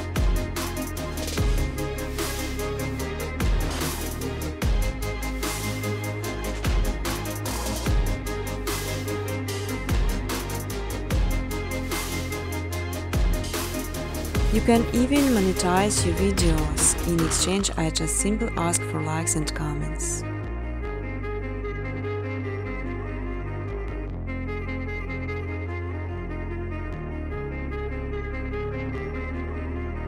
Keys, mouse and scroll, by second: 0.7 click, 1.0 click, 1.5 click, 1.8 click, 2.2 click, 2.5 click, 2.8 click, 3.1 click, 3.5 click, 4.9 middle click, 7.6 click, 13.3 click, 14.3 click, 15.0-16.0 typing, 17.2 click, 18.4 0, 18.8 click, 19.9 middle click, 23.6 click, 24.2 click, 27.3 click, 27.8-29.3 typing.